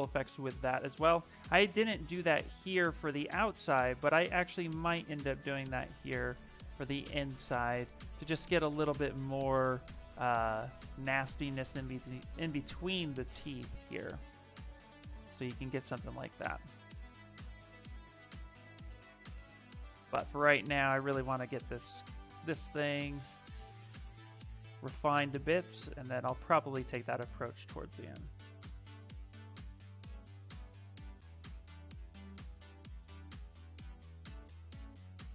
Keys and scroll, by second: 1.7 s, 10.7 s, 15.9 ctrl+z, 33.9 s.